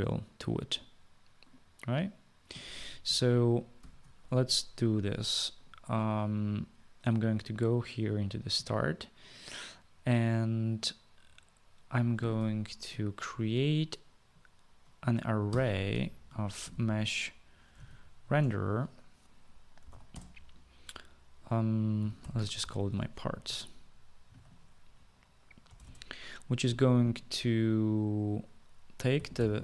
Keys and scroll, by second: 3.9 ctrl+s, 15.6-18.4 typing, 18.4 Return, 19.7-20.4 typing, 21.8-25.9 typing, 29.0-29.6 typing.